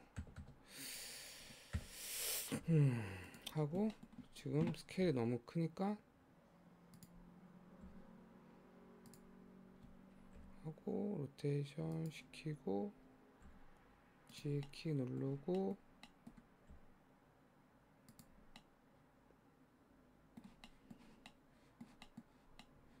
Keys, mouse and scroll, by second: 0.1 KP_1, 0.4 KP_3, 1.7 KP_1, 2.6 g, 3.7-4.0 scroll down 1, 4.0 shift+middle click, 4.3-5.1 scroll up 1, 5.1 s, 7.9 g, 10.4 r, 12.5-13.5 scroll up 2, 13.5 g, 14.7 middle click, 15.3-16.1 scroll up 2, 15.6 middle click, 16.1 middle click, 16.7 g, 18.6-21.1 middle drag, 21.1 scroll up 1, 21.3 middle click, 22.3-22.7 scroll up 3, 22.7-23.0 middle drag.